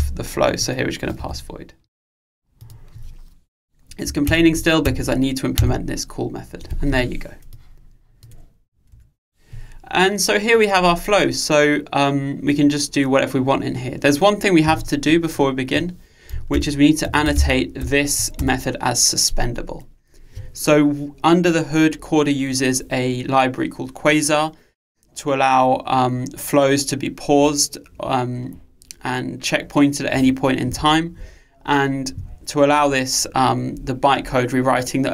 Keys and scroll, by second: 1.3 Escape, 4.3 alt+Return, 18.6 Return.